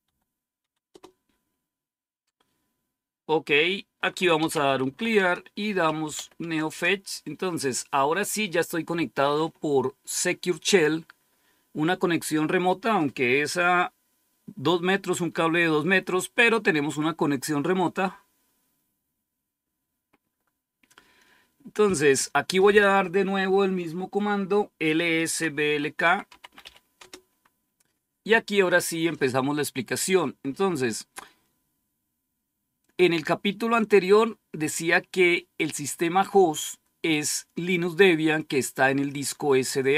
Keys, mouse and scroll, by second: 0.0-0.8 typing, 4.0-6.5 typing, 6.5 Return, 25.3-27.2 typing, 32.7-34.8 drag.